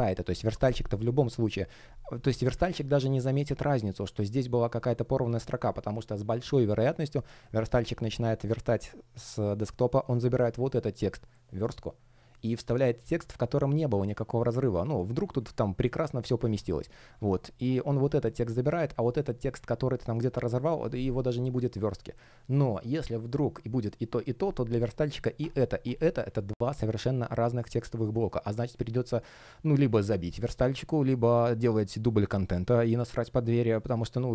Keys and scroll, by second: 2.6 super+я, 6.2 space, 16.3 alt+space.